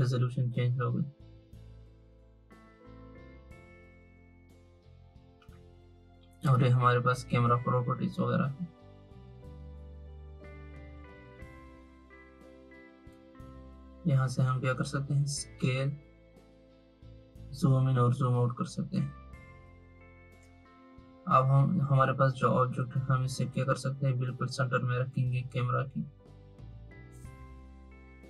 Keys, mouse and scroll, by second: 5.3 click, 13.0-16.0 drag.